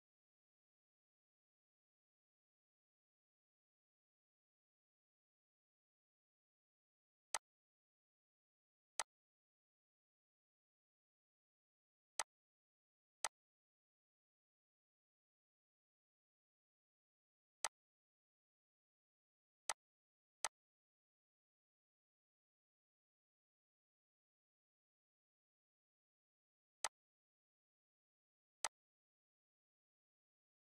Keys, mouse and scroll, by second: 0.0 ctrl+c, 6.7 click, 6.7-7.3 typing, 7.3 click, 12.1 click, 12.1 typing, 17.7 click, 17.7 typing, 22.5 typing, 26.8-30.6 drag, 26.8 typing.